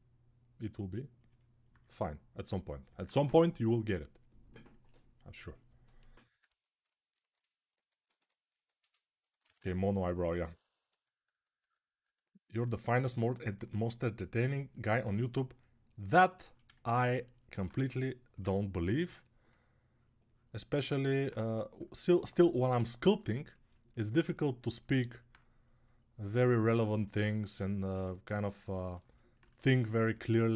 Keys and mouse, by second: 7.8-16.9 ctrl+alt+shift+right drag, 16.5 alt+q, 17.5-18.8 typing, 27.0-30.2 shift+drag.